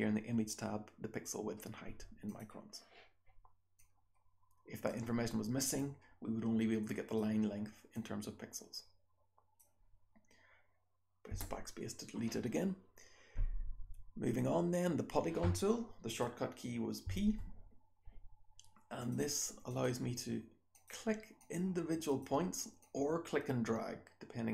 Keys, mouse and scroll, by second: 2.2 click, 3.7-4.8 drag, 5.7-7.1 drag, 7.9 click, 11.2 BackSpace, 16.0 click, 17.0 p, 19.0 click, 19.6 click, 20.7 click, 21.3 click, 22.0 click, 22.7-24.5 drag.